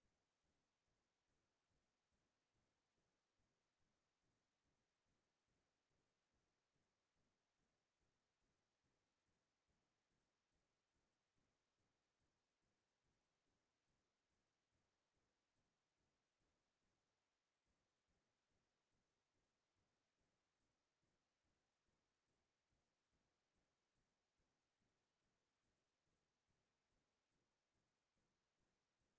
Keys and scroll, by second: 26.6 ctrl+space.